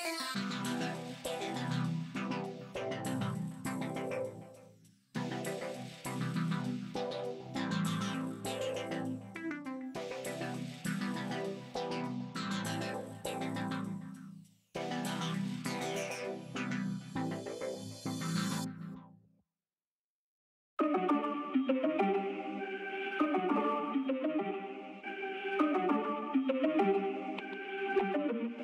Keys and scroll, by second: 4.0 Tab, 4.4 a, 18.6 Escape, 19.0 ctrl+z, 20.4 ctrl+z, 25.4 1, 25.8 Return.